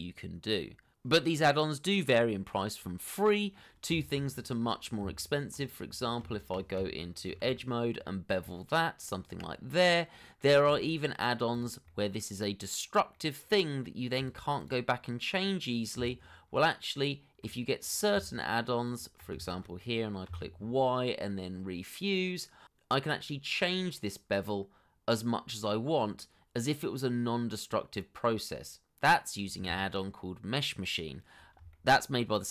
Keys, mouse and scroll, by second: 4.4 middle click, 5.3 shift+middle click, 5.9 scroll up 1, 6.3 Tab, 7.7 shift+middle click, 8.6 ctrl+b, 9.4-10.5 scroll up 1, 10.8 middle click, 12.1 shift+middle click, 12.4 middle click, 12.5-13.2 scroll up 1, 13.2 middle click, 15.9 double click, 16.3 middle click, 17.3 Tab, 20.2 ctrl+click, 20.8 shift+middle click, 21.2 middle click, 21.6 y, 24.2 w, 26.4-26.9 scroll up 1, 27.6 scroll down 1, 32.3 middle click.